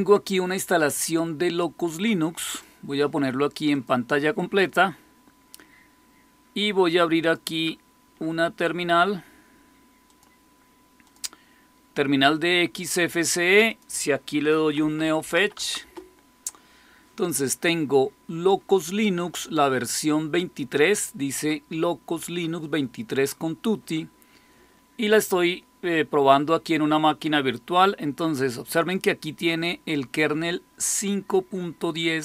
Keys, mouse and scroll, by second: 2.3 click, 3.6 click, 4.5 click, 7.1 click, 10.0 click, 11.0 click, 13.1 click, 13.6 click, 14.5-15.8 typing, 29.2-31.9 drag.